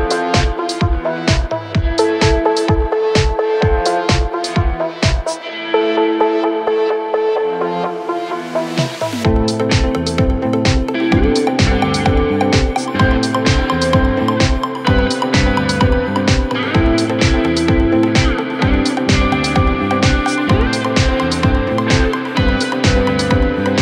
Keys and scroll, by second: 9.1 ctrl+z, 17.5 ctrl+z, 19.0 ctrl+z.